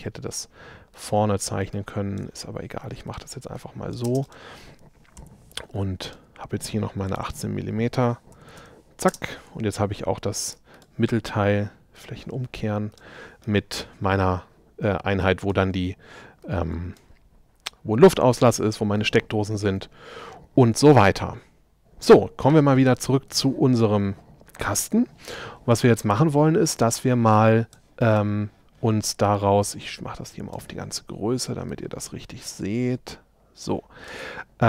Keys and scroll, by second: 4.1 shift+space, 5.2 p, 8.4 m, 8.7 Return.